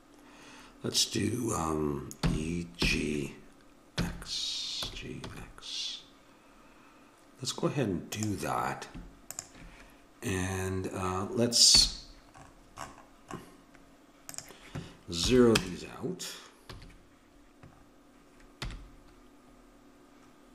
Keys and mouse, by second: 2.2 e, 9.3-11.7 drag, 11.7 n, 14.3-15.8 drag, 16.7 a, 18.6 n.